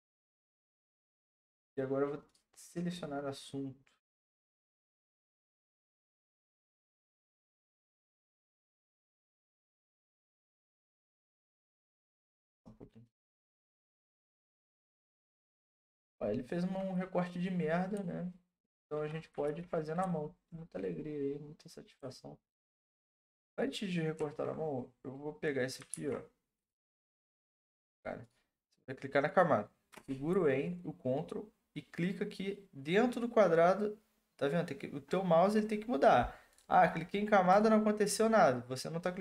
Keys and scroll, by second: 19.4 ctrl+d, 24.1 ctrl+c, 25.9 ctrl+d.